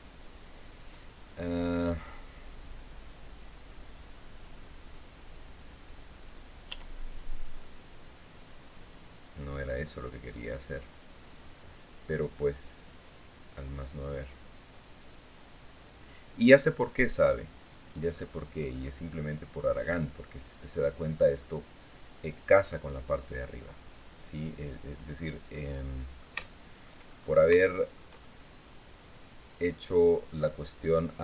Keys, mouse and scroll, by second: 6.4 e, 17.4 click, 18.3-18.8 scroll up 1, 25.3-26.7 middle drag, 26.9 shift+scroll up 1, 27.2 shift+middle click, 27.9 shift+middle click, 28.0-30.2 shift+drag.